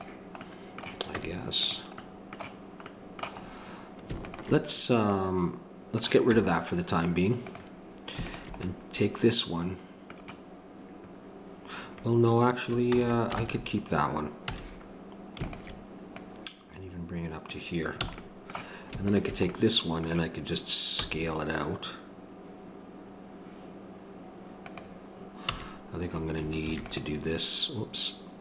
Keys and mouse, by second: 1.2 Tab, 4.3-6.3 drag, 6.3 x, 8.3-12.9 drag, 12.9 ctrl+z, 14.4 a, 15.4-17.7 drag, 19.1-20.9 drag, 20.9 s, 25.4 a, 26.6 ctrl+r.